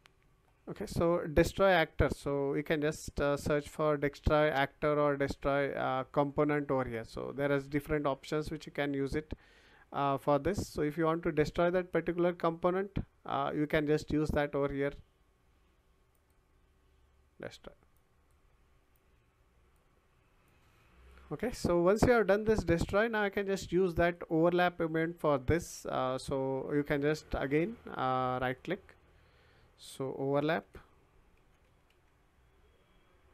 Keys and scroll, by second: 2.3 BackSpace, 30.6-32.4 typing.